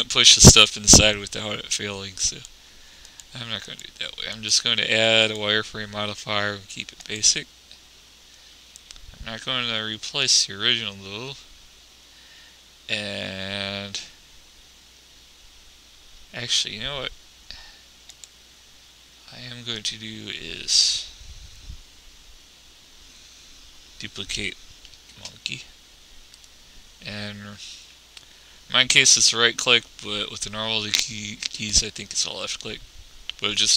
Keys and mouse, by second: 2.7-6.7 drag, 7.4 middle click, 10.6-12.4 drag, 18.5-21.9 drag, 25.3 shift+d.